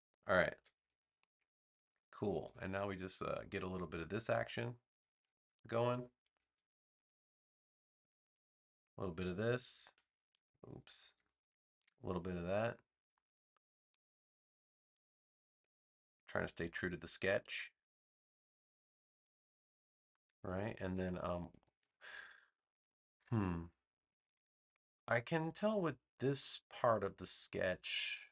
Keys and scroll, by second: 0.5 v, 20.7 space.